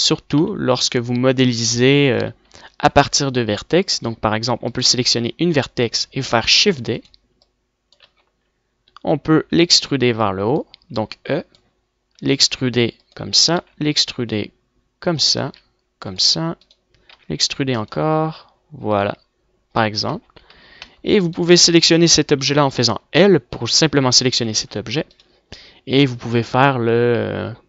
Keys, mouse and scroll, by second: 0.5 KP_1, 1.1 z, 1.7 a, 1.9 a, 3.0 a, 5.6 middle click, 6.4 shift+d, 8.2 middle click, 9.0 middle click, 9.4 e, 10.1 middle click, 10.5 click, 12.2 e, 13.6 e, 15.2 click, 15.5 e, 16.6 click, 17.1 e, 18.0 e, 20.2 Tab, 20.5 z, 20.7 Tab, 23.2 l, 24.6 g.